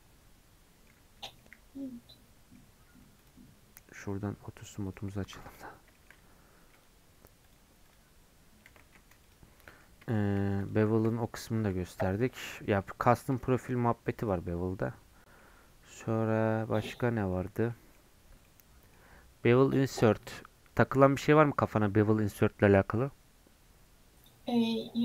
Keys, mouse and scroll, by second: 1.0 Tab, 1.4-2.6 middle drag, 2.6 scroll down 2, 2.9-4.9 right drag, 4.9 click, 5.2-6.7 middle drag, 6.7-9.5 drag, 9.5 scroll up 2, 9.6-10.6 middle drag, 10.6 click, 10.9 shift+middle click, 11.6 KP_Decimal, 11.9 scroll down 3, 12.1 middle click, 12.3 scroll up 1, 12.4 scroll down 3, 12.6 middle click, 13.1 click, 13.3 Tab, 13.9 Tab, 14.2 click, 14.4 Tab, 14.8 middle click, 15.4-15.9 scroll up 4, 15.9-17.5 middle drag, 17.5 Tab, 17.6 scroll down 2, 17.7 middle click, 18.2 scroll down 1, 18.4-25.0 middle drag.